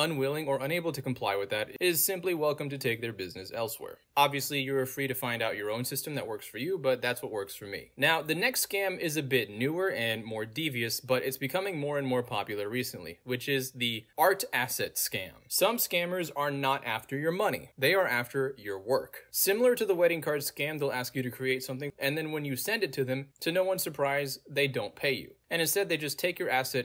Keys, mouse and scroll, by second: 9.9-14.4 typing, 11.8 ctrl+a, 16.9 click, 19.6 click, 21.4 scroll down 2, 22.5-24.1 middle drag, 22.5-23.7 scroll down 2, 23.7-24.1 scroll down 1, 25.8-26.8 middle drag, 25.8-26.8 scroll down 2.